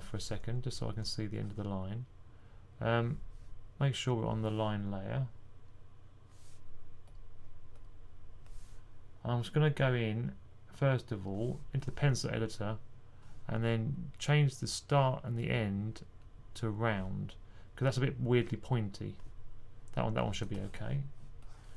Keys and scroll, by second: 0.8 typing.